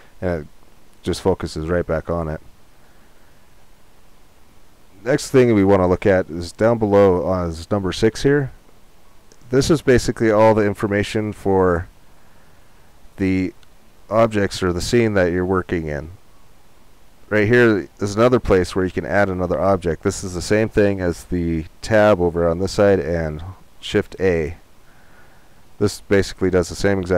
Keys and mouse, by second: 20.4-24.3 drag, 24.3 shift+a.